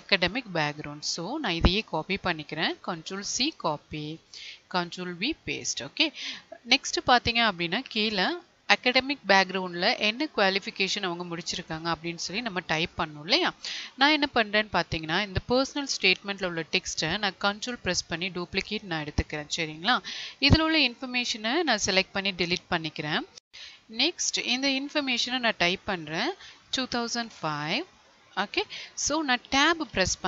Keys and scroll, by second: 2.6 ctrl+c, 4.7 ctrl+v, 21.5 Delete, 29.9 Tab.